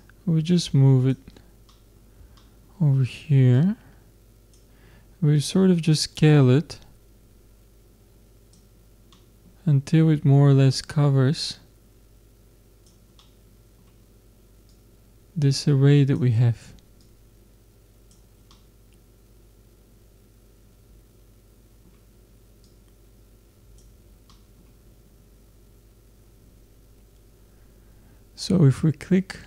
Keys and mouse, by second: 1.7-4.2 middle drag, 4.2-7.3 drag, 9.1 middle click, 10.9-12.7 drag, 14.7 middle click, 15.0-16.4 drag, 17.1-18.5 drag, 18.5-20.2 middle drag, 22.6-24.3 drag, 24.3-29.4 middle drag.